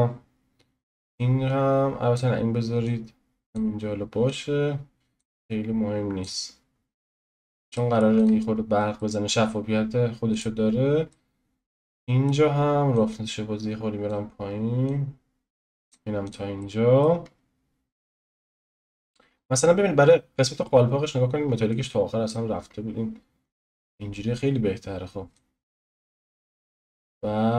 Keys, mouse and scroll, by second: 1.1-6.5 drag, 6.5-7.0 scroll down 1, 7.0-8.1 middle drag, 8.1 click, 8.5-8.9 scroll up 1, 8.9-9.7 middle drag, 9.7-10.3 scroll down 1, 10.3-11.1 drag, 11.1-12.9 middle drag, 12.9-16.6 drag, 16.6-17.3 middle drag, 17.3-18.3 scroll up 1, 18.3-19.0 shift+middle drag, 19.0 click, 19.3-20.1 scroll up 1, 20.1-21.7 scroll up 1, 21.7-23.4 drag, 23.4 scroll up 2, 23.6-25.3 scroll down 3, 25.3-27.5 drag.